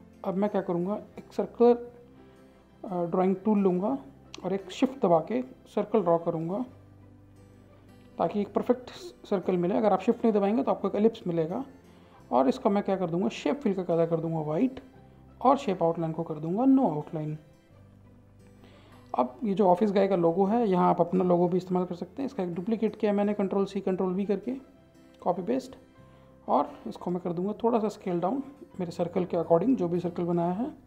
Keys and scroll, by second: 20.0 ctrl+c, 20.8 ctrl+v.